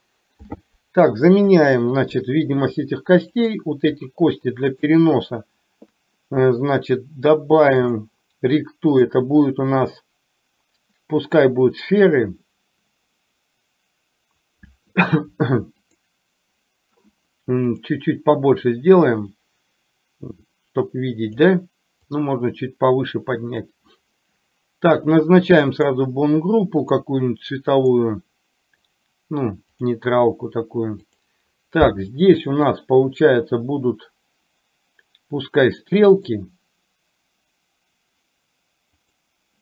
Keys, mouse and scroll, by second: 1.5 KP_3, 3.5 click, 4.8 shift+click, 9.1-15.2 drag, 19.3-21.3 drag, 22.1-26.0 drag, 27.8-29.1 drag, 31.1 click, 32.3 shift+click, 36.2-39.2 drag.